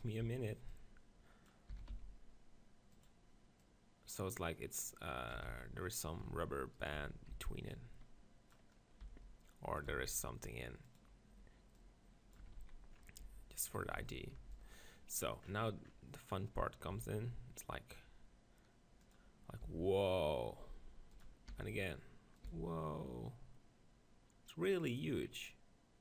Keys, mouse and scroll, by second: 0.2 b, 1.7 s, 3.6-5.4 drag, 5.4 Tab, 5.5 z, 6.2 Tab, 6.8-8.6 drag, 7.0 z, 7.3 b, 8.7-9.9 middle drag, 9.0 e, 9.9 right click, 9.9 s, 10.8 click, 11.8-13.6 drag, 12.5 Tab, 12.6 z, 13.2 Tab, 13.6 middle click, 13.7-15.8 drag, 14.0 z, 14.4 b, 16.9 e, 19.1-21.0 drag, 19.1 e, 19.6 s, 21.2-23.1 drag, 21.5 e, 22.5 s, 24.8 s, 24.9-26.0 drag.